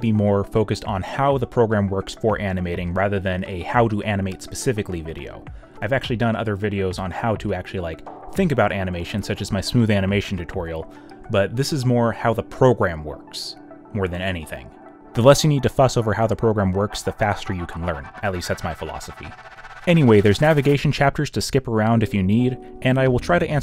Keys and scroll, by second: 2.9 z, 3.6 y, 4.7 q, 5.3 y, 6.2 z, 7.9 o, 9.1-11.1 typing, 12.1 ctrl+z, 12.9 space, 15.9 space, 16.2 alt+f, 16.7 z, 18.6 b, 18.8 b, 21.0 b, 21.5 y.